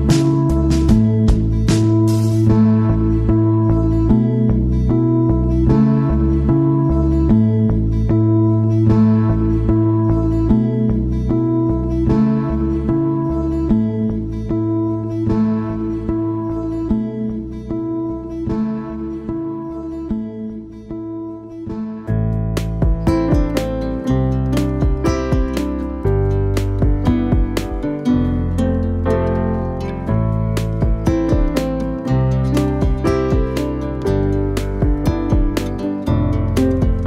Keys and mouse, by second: 1.1 middle click, 1.7 middle click, 2.5 middle click, 3.0 middle drag, 3.4 middle click, 4.0-4.4 middle drag, 4.5 g, 5.4 r, 6.5 g, 7.2-7.8 middle drag, 7.9 g, 8.6 middle click, 9.3 middle click, 9.8 middle click, 12.3 g, 12.9 r, 20.3-20.7 right drag, 20.7 middle click, 21.5 middle click, 25.9 middle drag, 26.6-33.2 right drag, 33.2 middle click, 33.7-34.5 middle drag, 35.0 right click, 35.4 right click.